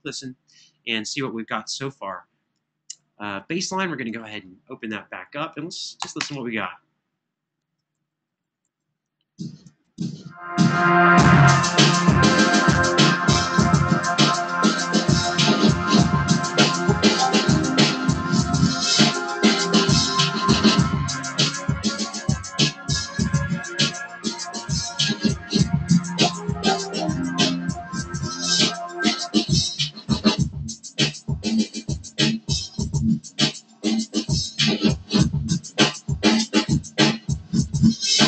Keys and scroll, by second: 5.7 Return, 5.9 space, 7.7 super+], 8.1 super+], 10.2 super+].